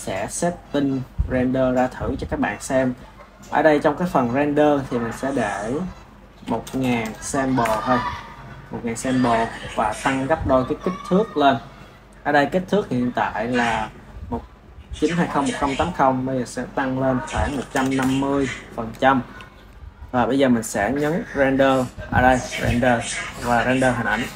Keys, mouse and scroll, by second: 0.1-1.0 drag, 3.8-5.0 middle drag, 5.0-6.6 drag, 6.6 KP_0, 7.6 KP_0, 9.2-10.4 middle drag, 10.4 click, 16.5-20.5 drag, 20.5 ctrl+s, 22.2-24.3 drag.